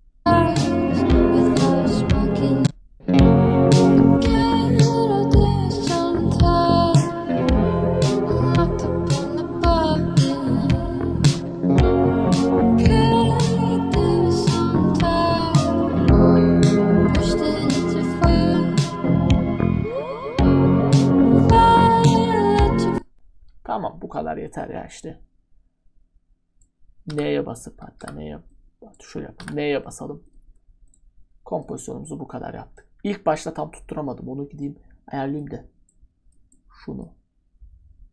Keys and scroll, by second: 6.0-7.4 typing, 8.4 typing, 9.5 typing, 11.7 typing, 12.8 typing, 13.8 typing, 14.9 typing, 16.0-18.1 typing, 19.2 *, 21.4 *, 22.5 *, 27.1-29.4 typing.